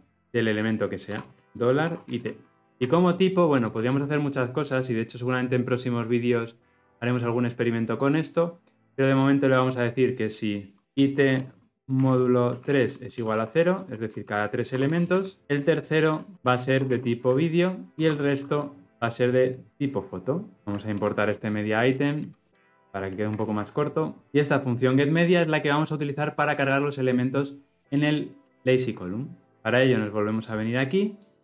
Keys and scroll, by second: 17.9 Return, 20.6 Return, 23.4 ctrl+alt+o.